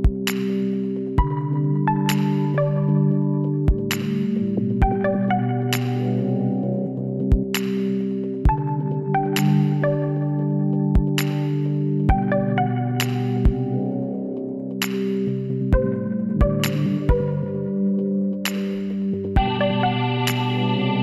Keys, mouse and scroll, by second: 8.8 middle click, 9.5 KP_2, 10.7 KP_3, 12.0 z, 14.3 Tab, 15.2-17.3 middle drag.